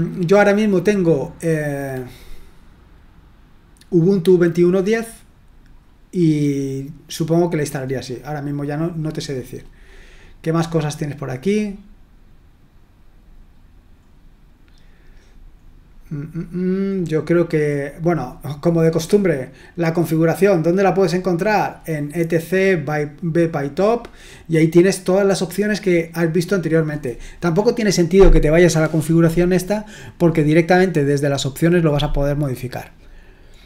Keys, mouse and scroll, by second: 6.8-11.6 scroll down 2, 11.6-13.2 scroll down 1, 13.2-14.2 scroll down 1, 14.2-15.6 scroll up 1, 15.6-16.2 scroll up 1, 16.3-20.6 scroll down 3, 20.6-21.4 scroll down 1, 21.4-23.8 scroll down 1, 23.8-25.3 scroll down 1, 25.3-29.2 scroll down 1, 29.2-32.7 scroll down 1, 32.7-33.6 scroll down 1.